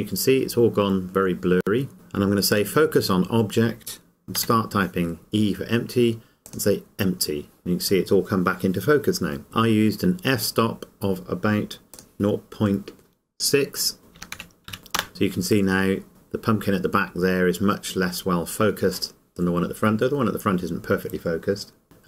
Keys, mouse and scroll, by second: 2.7 click, 11.9 click, 14.2 KP_0, 15.7 KP_Enter, 16.1-17.1 scroll up 1.